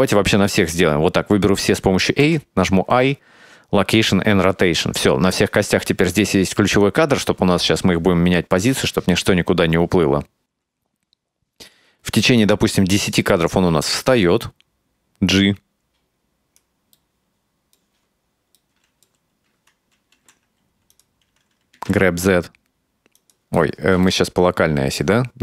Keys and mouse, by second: 0.0 a, 2.3 i, 6.9-12.5 drag, 13.5-16.7 right drag, 17.0-17.9 middle drag, 18.6-19.2 middle drag, 20.2 r, 21.8 g, 23.6 middle click, 24.1-25.0 middle drag.